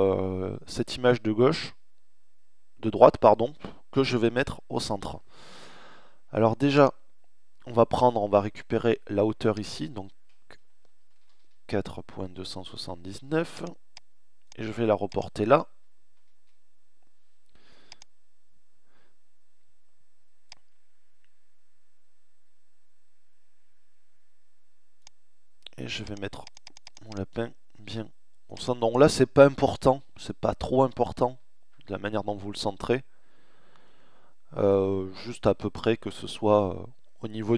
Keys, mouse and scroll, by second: 10.2 ctrl+c, 10.5-12.9 middle drag, 15.9-19.5 middle drag, 21.3 middle click.